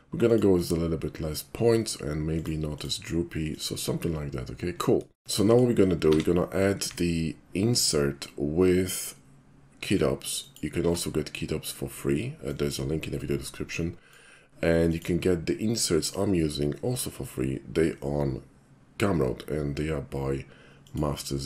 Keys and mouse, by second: 0.2 click, 0.6 click, 2.4 click, 2.8 click, 3.5 click, 5.5 shift+middle click, 5.8 shift+middle click, 6.1 q, 10.5 alt+click, 12.5-14.1 alt+drag, 14.9 click, 20.9 click.